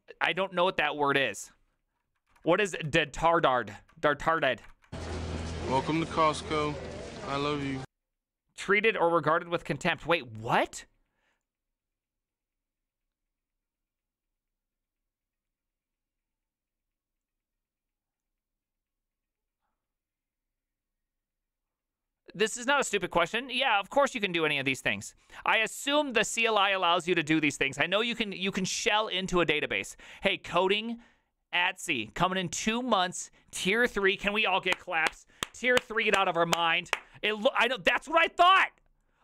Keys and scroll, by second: 2.9 ctrl+c, 2.9 alt+h, 4.3 alt+h, 4.8 alt+h, 5.1 ctrl+t, 5.8 ctrl+v, 6.0 Return.